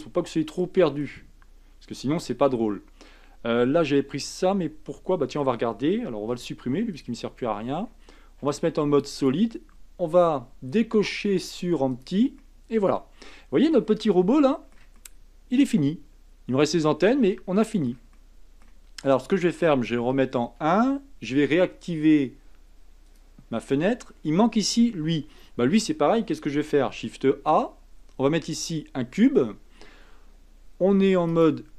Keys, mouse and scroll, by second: 0.4-2.4 shift+middle drag, 2.4-3.6 scroll down 3, 3.6-5.4 middle drag, 5.4 scroll up 1, 6.3 x, 7.6 scroll down 2, 8.4 z, 11.9 click, 12.4-17.9 middle drag, 18.1-20.0 shift+middle drag, 20.0 KP_1, 23.0 click, 26.9 shift+a, 31.3-31.7 right drag.